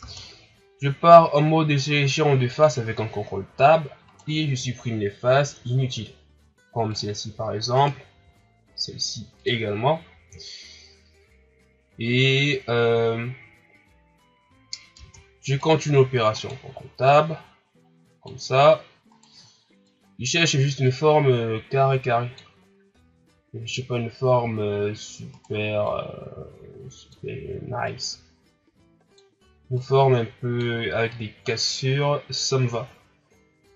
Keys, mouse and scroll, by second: 4.0 right click, 5.2 Delete, 7.7 right click, 8.1 Delete, 14.9 ctrl+Tab, 16.3 right click, 17.0-19.1 drag, 19.1 right click, 19.8-22.8 drag, 25.3 right click, 25.8-32.8 drag.